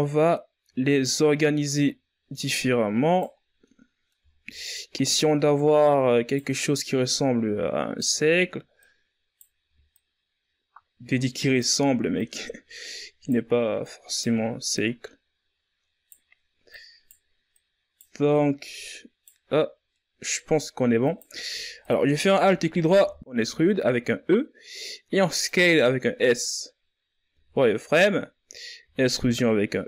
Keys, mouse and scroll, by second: 1.2 right click, 2.9 scroll down 1, 3.2 middle click, 3.8-5.1 shift+scroll up 3, 5.1 right click, 6.6 right click, 8.3 right click, 9.5 right click, 11.7 right click, 13.4 right click, 14.3 right click, 16.2 right click, 17.0 right click, 17.9 right click, 19.1-19.5 scroll down 1, 19.5-20.5 middle drag, 20.5 right click, 21.3 alt+right click, 22.5 KP_1, 22.7 s, 26.8 z, 28.3 e.